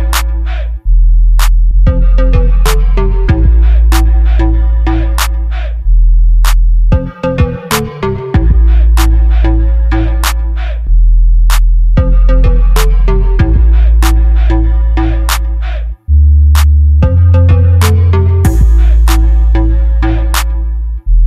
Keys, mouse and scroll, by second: 0.6-1.6 drag, 1.6 right click, 4.9 middle click, 6.4-7.6 middle drag, 7.7 middle click, 7.8 middle click, 9.2 middle click, 10.1-11.5 drag, 11.5 KP_7, 12.3 BackSpace, 13.2 click, 14.3 KP_7, 17.9-18.9 drag, 18.9 shift+a.